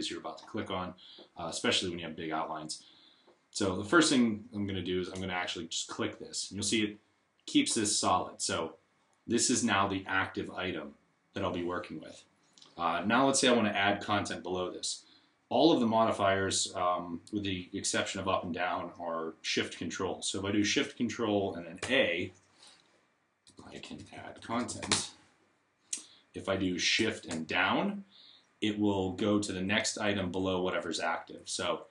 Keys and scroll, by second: 21.6 shift+a, 23.0-25.2 typing, 29.3 shift+Up, 30.1 shift+Up, 30.7 shift+Up.